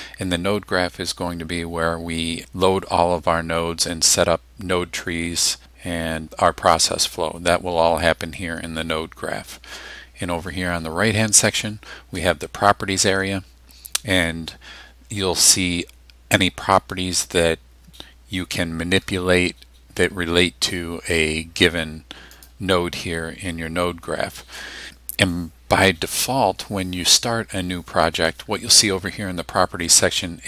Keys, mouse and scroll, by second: 22.3 click.